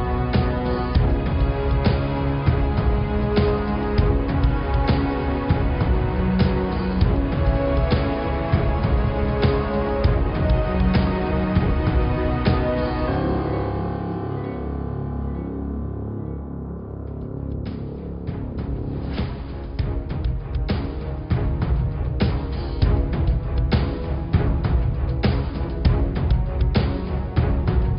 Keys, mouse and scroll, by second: 1.0 click, 2.6 f, 3.0-4.6 scroll up 2, 4.9 Tab, 5.4 Tab, 6.2 click, 7.4 f, 7.6-8.5 scroll down 3, 8.5 Tab, 9.1 click, 10.2 r, 11.1 Tab, 11.4 click, 13.6 g, 14.6 click, 15.3 g, 17.1 Tab, 17.7 click, 18.3 g, 23.3-24.3 scroll up 3, 24.3 shift+g, 25.6 shift+d, 27.7 shift+d.